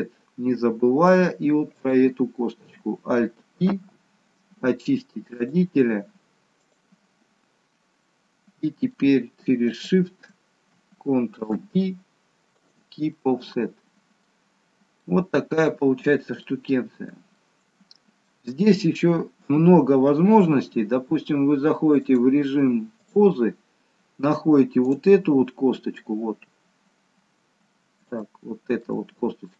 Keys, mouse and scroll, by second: 1.7 click, 3.6 alt+p, 8.0 middle click, 9.7 shift+click, 11.5 ctrl+p, 13.1 middle click, 14.4-15.0 scroll down 1, 15.0 middle click, 15.0-16.1 scroll down 1, 16.4 alt+middle click, 17.3 middle click, 19.4 KP_3, 22.0 click, 24.9 click, 25.5-27.7 scroll up 1, 28.0 scroll up 1, 28.3 shift+middle click.